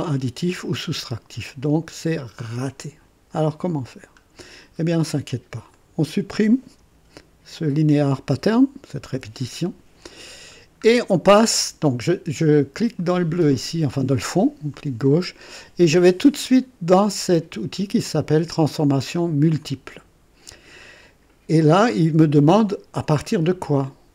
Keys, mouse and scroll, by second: 1.8 click, 4.0 scroll down 2, 5.6 click, 9.1 Delete, 10.5 scroll down 1, 11.1-11.8 right drag, 12.9 click, 14.7 click, 19.5 click.